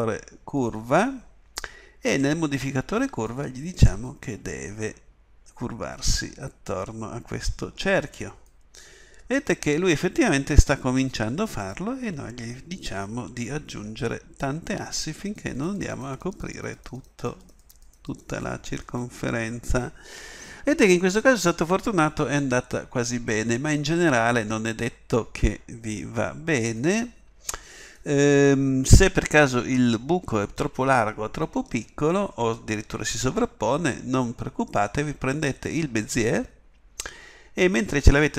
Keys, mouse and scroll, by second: 8.4-38.3 drag.